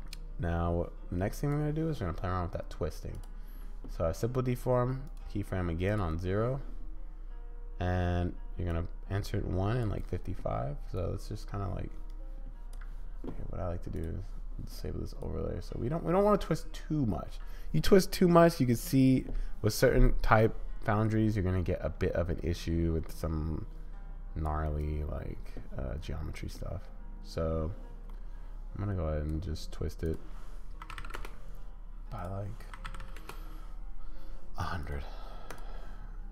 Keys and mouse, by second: 0.5-1.5 drag, 3.1 click, 5.2 click, 8.7-9.8 drag, 10.9-12.7 drag, 13.9 click, 15.3-17.0 drag, 20.2-24.6 drag, 24.6 middle click, 24.8-26.2 drag, 26.2-28.2 right drag, 28.2-29.3 drag, 30.2 right click, 30.4-31.8 drag, 32.2-34.8 drag, 33.0 0, 35.6 middle click.